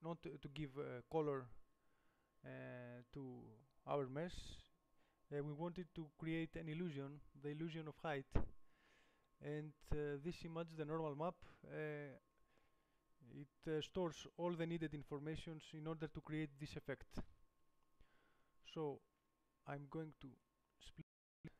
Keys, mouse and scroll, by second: 20.6 middle click, 20.9 middle click, 21.1-21.5 middle drag.